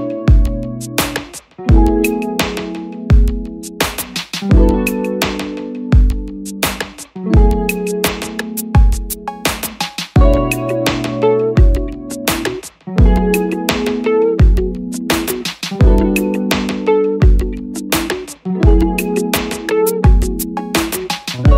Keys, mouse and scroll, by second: 1.6 double click, 18.5 click.